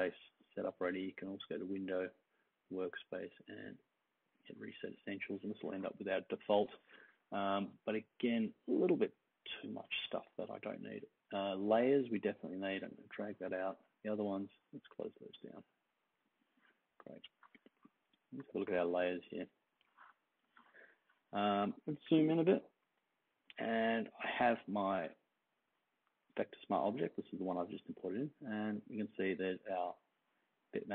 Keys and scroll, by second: 22.0 super+=, 22.2 super+=, 22.5 super+=.